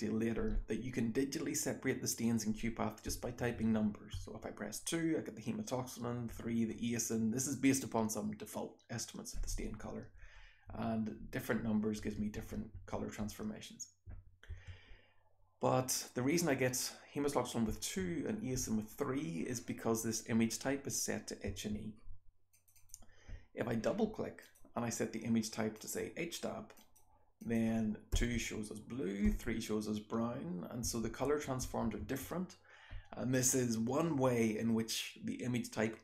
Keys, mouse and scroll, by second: 3.1-3.8 scroll up 1, 3.1 2, 3.6 3, 4.2 2, 6.4 3, 9.5-14.5 typing, 9.8-10.3 scroll up 1, 12.8-14.1 scroll up 3, 14.1-17.7 scroll up 1, 17.7-18.6 scroll up 1, 17.7 2, 18.6 3, 21.5 1, 21.7-22.6 scroll up 1, 22.6 click, 22.6-22.9 scroll up 1, 22.8 click, 27.4 click, 28.2 2, 29.3 3, 30.9 2, 31.3 3, 31.7 2, 32.0 1.